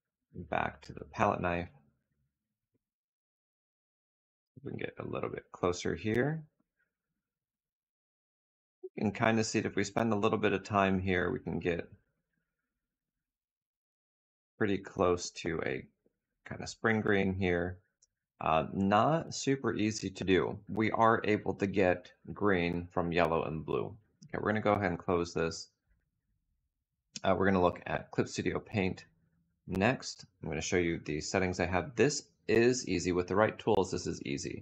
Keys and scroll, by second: 0.4 k, 24.2 space.